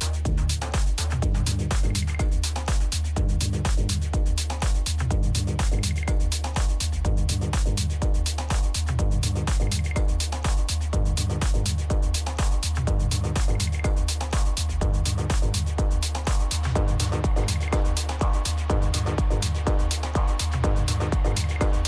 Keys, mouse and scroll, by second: 1.2 middle click, 1.8 a, 2.5 z, 3.2-5.0 middle drag, 5.1-7.5 middle drag, 9.1 KP_3, 10.2 z, 10.7-12.5 middle drag, 11.3 a, 11.8 a, 17.1 middle click, 18.3 a, 18.7 a.